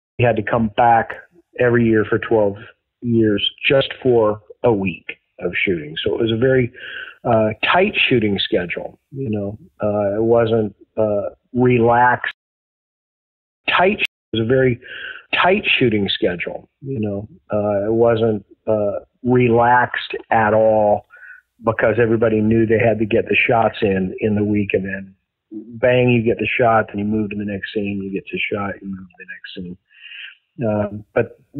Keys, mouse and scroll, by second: 0.0 click, 0.1 space, 9.0 click, 9.6 click, 11.0-12.2 drag, 12.2 space, 13.1 ctrl+shift+Delete, 13.5 space, 13.9 space, 14.1 click, 14.2 space, 16.2-18.3 drag, 18.7 click, 20.7 click, 21.5-22.7 drag, 23.0 click, 23.4 ctrl+s, 24.6-26.4 drag, 26.9 click.